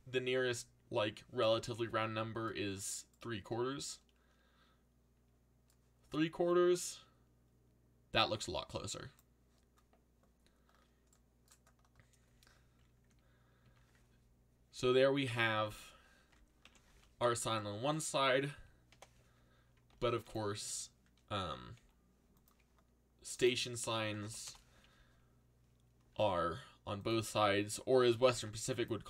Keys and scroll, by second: 0.5 Escape, 16.6 ctrl+l, 19.9 shift+d, 20.6 l, 21.7 r, 23.7-24.6 typing, 25.7-26.6 typing, 27.9-28.8 typing.